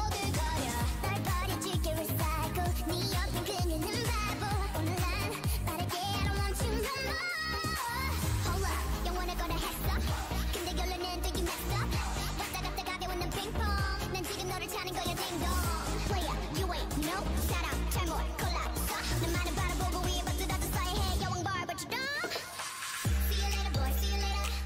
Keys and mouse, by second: 6.1 KP_1, 6.8 a, 7.7 shift+a, 8.9 a, 9.3 h, 9.7 shift+a, 13.2 shift+a, 17.9 middle click, 19.2-20.9 drag, 22.1-24.6 drag.